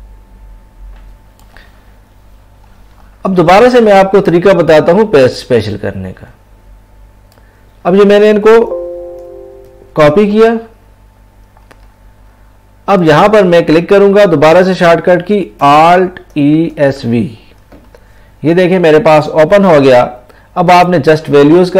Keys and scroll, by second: 8.5 ctrl+v, 9.7 ctrl+c.